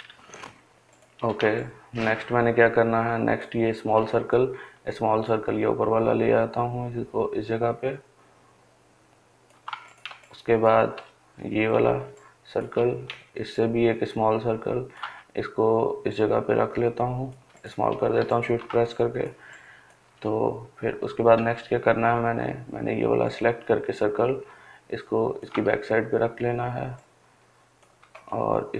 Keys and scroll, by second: 1.7-2.5 Delete.